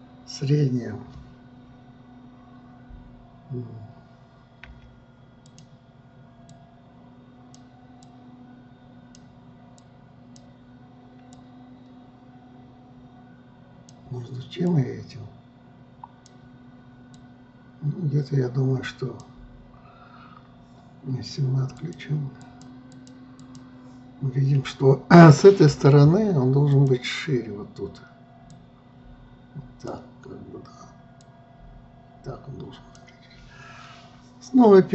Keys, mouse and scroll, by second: 7.1-14.9 drag, 15.3-20.8 drag, 22.3 click, 23.0 click, 23.4 click, 24.0 click, 26.3 f, 29.1-34.8 drag.